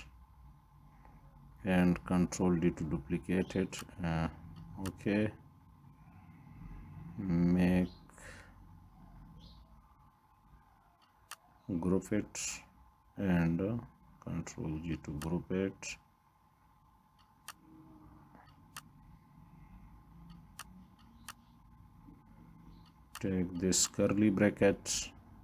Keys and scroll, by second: 1.8 ctrl+d, 2.0 ctrl+d, 9.9 ctrl+g, 14.0 ctrl+g.